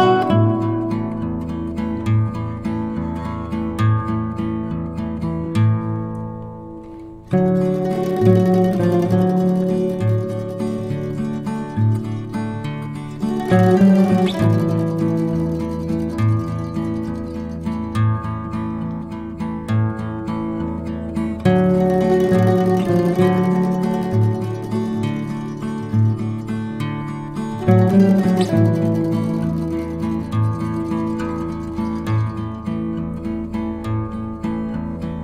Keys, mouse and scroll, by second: 0.9 click, 1.5 ctrl+d, 2.2 shift+click, 3.1 click, 7.1 ctrl+z, 7.6 ctrl+d, 8.0 shift+click, 9.3 click, 10.8 ctrl+z, 11.2-11.8 click, 11.9 ctrl+z, 13.2 ctrl+d, 14.2 click, 14.7 ctrl+z, 15.3 ctrl+d, 15.9 click, 16.6 ctrl+z, 18.1 ctrl+d, 18.8-19.4 click, 19.5 ctrl+z, 22.7 click, 23.6 Delete, 24.5 click, 24.8 Delete, 25.0 click, 25.4 Delete, 25.6 click, 27.2 ctrl+z, 27.6 click, 28.6 ctrl+d, 29.6 shift+click, 33.9 ctrl+z, 34.7 ctrl+d.